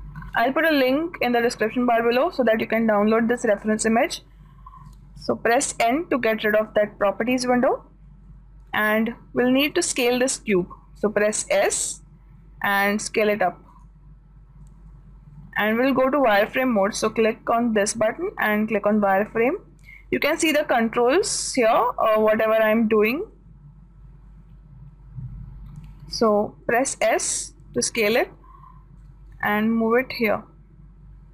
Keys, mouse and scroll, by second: 6.3 n, 9.4-11.3 middle drag, 12.1 s, 17.6-19.4 drag, 27.3 s, 29.4-31.1 drag.